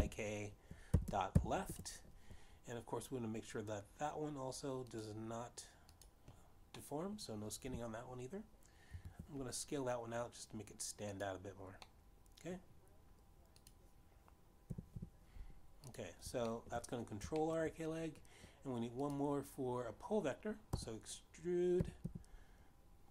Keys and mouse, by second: 0.3-2.5 typing, 3.0 Return, 6.3 click, 7.4 click, 8.3 middle click, 10.2 ctrl+Up, 12.6 click, 13.4 middle click, 14.9 click, 16.3 g, 16.3 y, 17.4 click, 18.0 shift+middle click, 18.9 shift+middle click, 20.5 click, 22.0 e, 22.4 y.